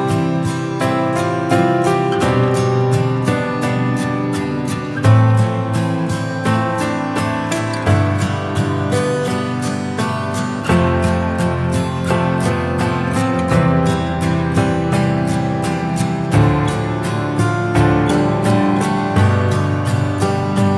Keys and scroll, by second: 2.8 ctrl+8.